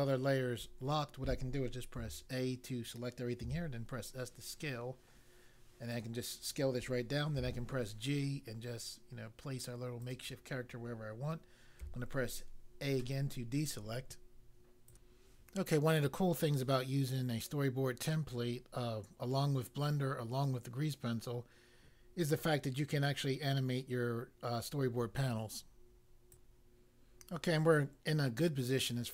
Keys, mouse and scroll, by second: 2.0 a, 3.4 s, 5.9 click, 7.3 g, 10.0 click, 11.7 a, 14.8 click, 26.2 click.